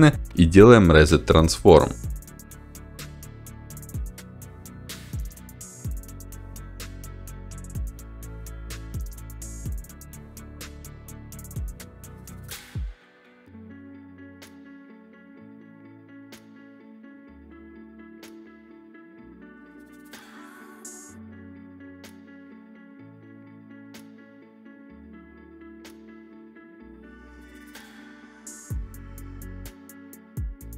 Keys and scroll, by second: 2.6 1, 3.2 Return, 4.1 1, 4.8 Return, 6.2 1, 6.7 Return, 8.9 s.